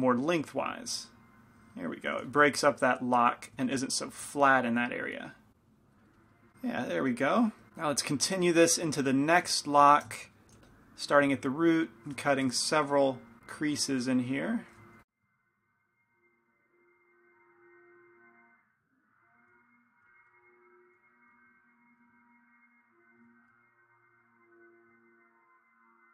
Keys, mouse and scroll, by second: 2.4 f, 5.2 click, 6.1-7.7 middle drag, 7.8-10.8 middle drag, 10.8 f, 11.6-13.4 drag, 11.6 right click, 12.4 f, 13.6-19.7 drag, 15.0 f, 17.9 right click, 18.1 middle click, 18.3 right click, 19.5-22.0 typing, 19.7 middle click, 20.5-25.0 drag, 21.1 right click, 23.3 shift+f, 25.1-26.1 drag.